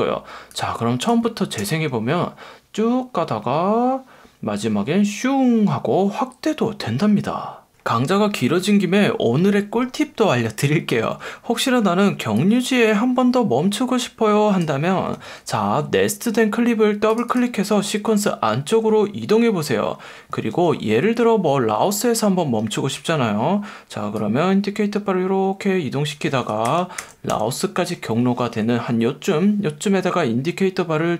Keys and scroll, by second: 1.6 space, 15.3 F1, 16.2 F1, 20.5 F1, 22.9 F1, 26.6 Left, 27.3 Right, 28.4 F1.